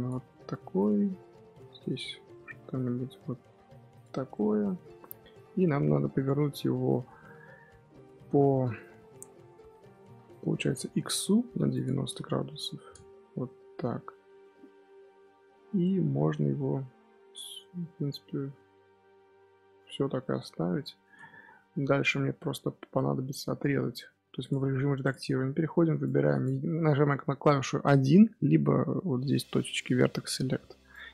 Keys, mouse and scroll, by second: 0.7-3.8 drag, 4.2-7.3 middle drag, 8.9 scroll up 1, 9.0 KP_1, 9.9 scroll down 1, 9.9-11.6 middle drag, 11.6-13.4 drag, 13.4-15.1 middle drag, 15.1-15.7 scroll up 4, 15.7-20.3 middle drag, 20.3 KP_1, 21.9 Tab, 22.4 z, 23.3 1, 24.2 Tab, 24.3 click, 24.9 click, 25.2 Tab, 25.4-25.7 scroll up 2, 25.7 1, 25.9 click, 30.8 click.